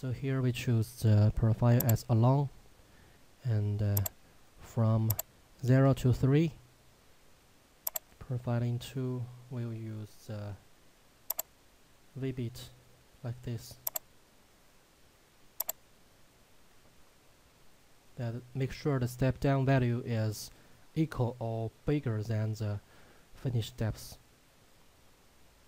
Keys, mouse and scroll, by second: 5.9 3, 8.0 click, 23.7-25.6 scroll down 1.